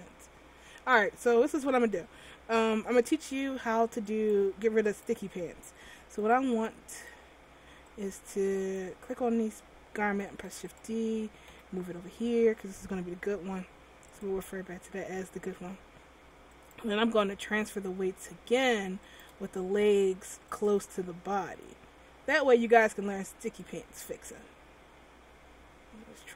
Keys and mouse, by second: 4.3-6.3 right drag, 6.3 middle click, 7.2 click, 8.1 right click, 10.4 shift+d, 11.7 m, 16.7-19.3 drag.